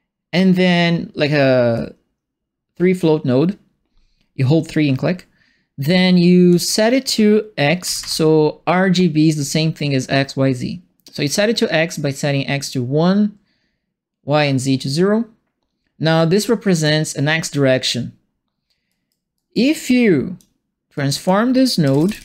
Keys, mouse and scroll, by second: 1.7-2.9 drag, 6.5 click, 7.8 KP_1, 7.9 KP_Enter, 16.1 click, 18.8 right click, 19.3 right click, 19.8 click, 20.9 click, 21.5-22.2 typing.